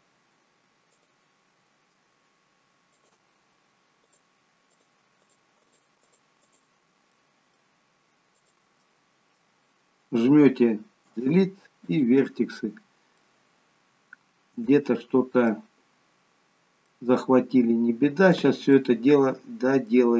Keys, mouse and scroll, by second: 2.9 ctrl+click, 3.2-7.0 shift+click, 7.0 middle click, 8.3 shift+click, 8.7 middle click, 11.0 Delete, 13.2 middle click, 16.0-16.9 scroll down 1, 16.9 middle click, 18.7 middle click.